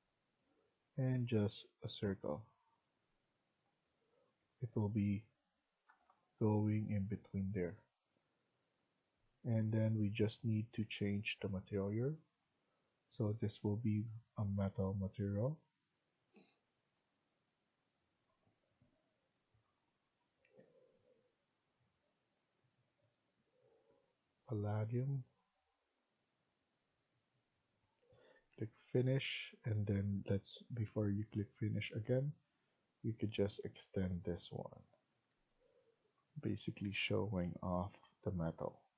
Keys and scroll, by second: 4.0 Escape, 4.3 Escape, 5.7 Down, 6.0 Down, 7.5 Escape, 35.2 Escape.